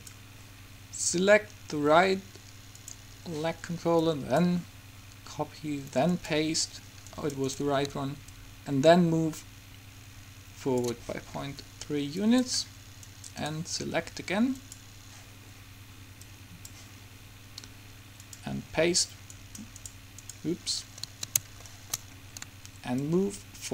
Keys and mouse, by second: 3.0-5.8 drag, 6.3-8.1 drag, 7.3-8.9 right drag, 8.5-10.4 drag, 12.4-14.1 drag, 13.1-15.2 right drag, 14.7-18.1 drag, 18.3-19.5 drag, 19.5 middle click, 20.2 right click, 23.1-23.7 drag.